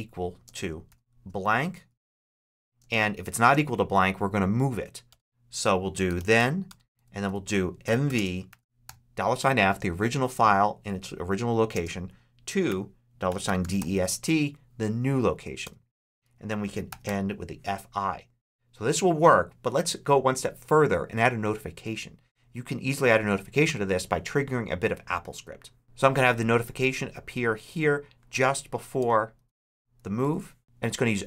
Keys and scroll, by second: 0.0-0.7 typing, 2.7 shift+space, 2.9 ], 3.3 space, 4.7-9.5 typing, 4.9 Return, 5.4 Tab, 6.8 Tab, 11.6-14.1 typing, 15.5 Return, 16.0 Tab, 16.7 f, 28.8 Return, 29.2 Tab, 29.9 super+Tab, 30.1 super+v.